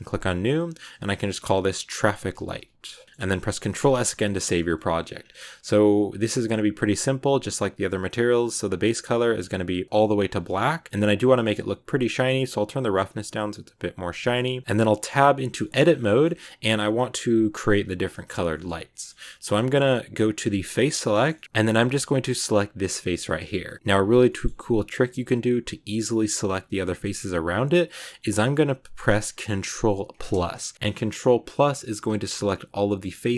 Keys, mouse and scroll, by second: 0.5-3.0 drag, 3.0 middle click, 3.5 ctrl+s, 3.9-5.0 shift+middle drag, 5.0 scroll down 5, 5.9-7.1 scroll down 2, 7.7 click, 9.3 click, 10.3 middle click, 10.5-10.9 scroll up 1, 10.9-11.2 scroll down 10, 11.2-12.4 middle drag, 12.4-14.2 drag, 14.2 scroll up 1, 14.2 middle click, 14.8 Tab, 15.5 shift+middle click, 15.7 scroll up 2, 15.9-17.8 middle drag, 17.8 scroll down 2, 18.0 shift+middle click, 18.6 scroll up 1, 18.8 middle click, 19.4 scroll up 1, 19.5-20.5 middle drag, 20.5 click, 21.0-22.7 shift+middle drag, 22.7 right click, 23.1 middle click, 23.3-24.2 scroll up 1, 24.2-30.2 middle drag, 30.2 ctrl+KP_Add.